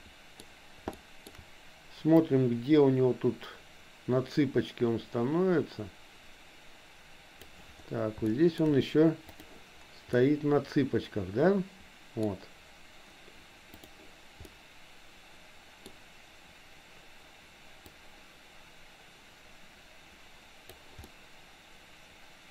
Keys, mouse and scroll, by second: 1.0 shift+middle click, 2.3-7.6 drag, 8.2 shift+middle click, 9.3 click, 10.2-12.2 middle drag, 13.7 click, 14.5-15.8 middle drag, 18.0-20.8 drag, 21.1-22.5 middle drag.